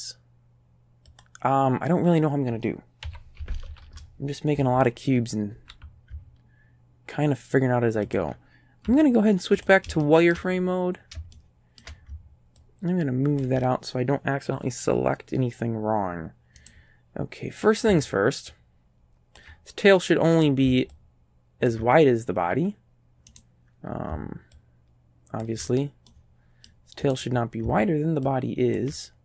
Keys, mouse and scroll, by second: 1.1 click, 3.1 s, 3.4 KP_Decimal, 3.8 KP_5, 3.9 KP_Enter, 5.0 middle click, 5.6 g, 8.1 ctrl+click, 8.9 z, 9.6 click, 10.0 shift+right click, 10.1 shift+click, 10.4 shift+right click, 11.3 shift+right click, 12.6-13.6 ctrl+drag, 16.6 right click, 18.5-19.6 ctrl+drag, 20.4 right click, 21.0 ctrl+click, 23.4 right click, 24.6-25.6 ctrl+drag, 26.1 middle click, 27.1 right click, 28.3 ctrl+click.